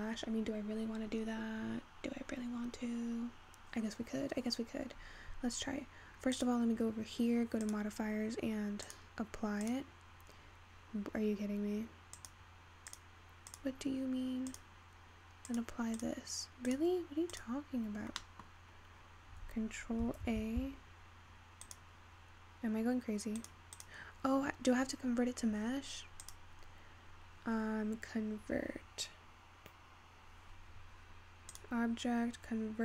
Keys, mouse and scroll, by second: 0.1-3.4 scroll down 3, 5.3-5.9 scroll down 3, 5.9-6.5 scroll up 6, 6.5 click, 8.4 click, 9.0-12.0 drag, 14.6-16.4 drag, 17.0 click, 17.7 click, 18.2-19.0 scroll up 3, 19.0-20.3 scroll down 1, 20.3 ctrl+a, 23.7 click, 24.8 click, 26.8-29.3 drag, 32.1-32.8 drag.